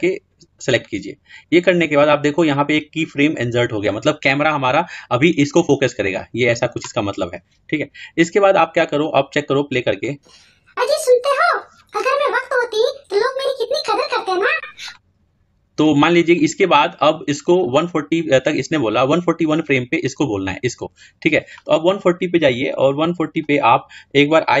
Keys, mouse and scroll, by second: 9.9-21.9 drag, 22.8-24.6 drag.